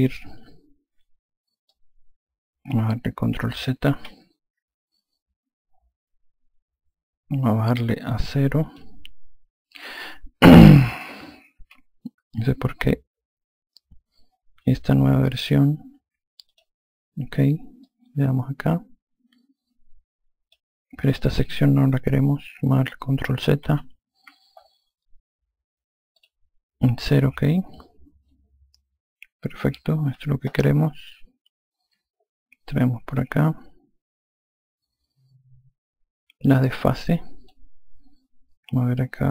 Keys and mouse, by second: 1.6 click, 3.9 ctrl+z, 8.6 click, 11.5 ctrl+z, 16.4 click, 17.8 click, 26.1 click, 28.2 click.